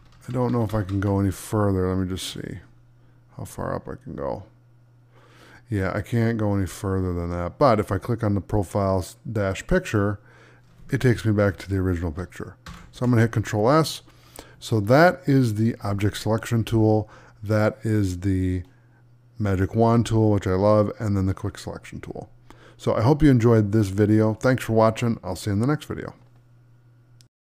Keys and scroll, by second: 12.5 ctrl+s.